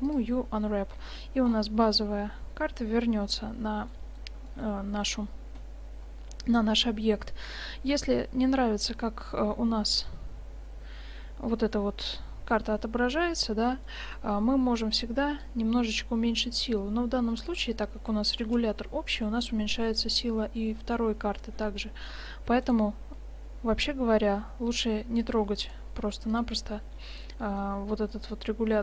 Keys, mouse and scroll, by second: 1.0 Tab, 2.7-4.2 middle drag, 6.2 middle click, 8.3-8.8 middle drag, 13.9-14.2 middle drag, 19.3 click, 21.1 middle click, 22.7-24.6 right drag, 23.7 g, 25.7 right click, 26.0 g, 26.7 click.